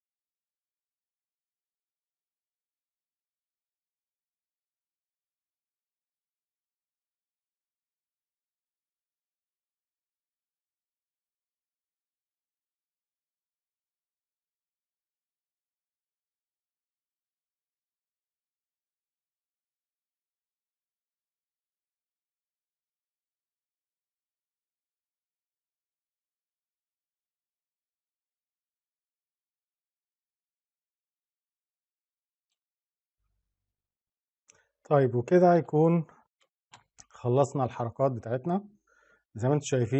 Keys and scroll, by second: 14.4 ctrl+z, 28.7 ctrl+z.